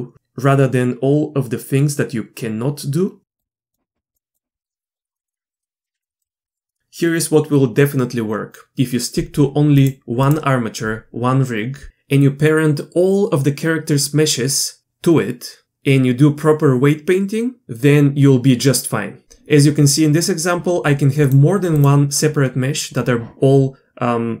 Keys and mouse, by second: 3.4 click, 4.9 shift+middle click, 6.1 Delete, 6.4 middle click, 6.7 middle drag, 21.3-21.8 drag.